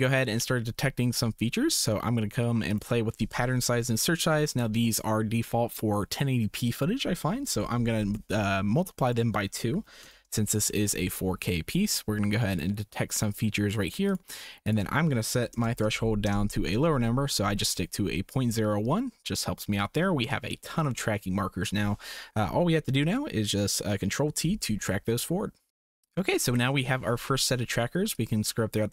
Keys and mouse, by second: 2.8-8.1 drag, 9.1-10.2 drag, 12.5 click, 14.0 click, 14.6-16.8 drag, 24.2 ctrl+t, 28.2-28.9 drag.